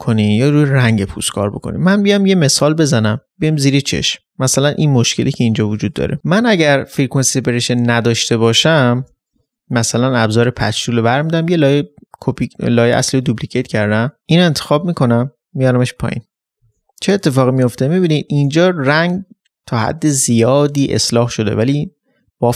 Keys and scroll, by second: 6.2 ctrl+z, 9.0 ctrl+j, 16.6 ctrl+d.